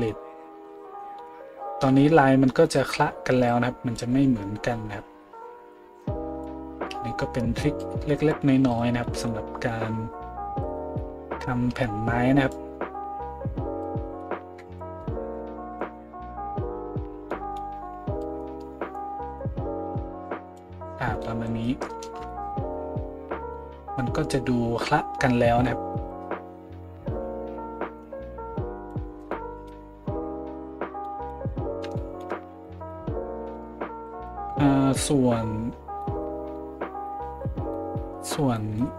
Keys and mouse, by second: 8.7-10.6 middle drag, 10.6-38.9 drag.